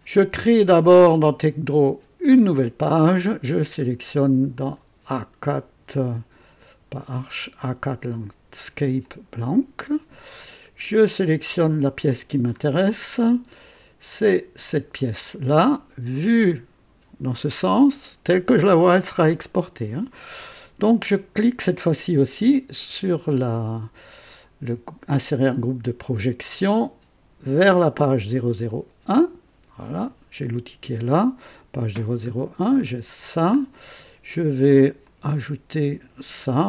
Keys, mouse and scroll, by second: 2.2 click, 3.4-3.8 scroll down 2, 4.4 scroll up 2, 6.4-7.1 scroll up 2, 8.1 click, 9.0 click, 10.9 click, 12.5 scroll up 2, 13.7 click, 25.5 click, 27.4 click, 28.7 click, 31.5 click, 32.3-33.6 scroll down 5, 35.0 click.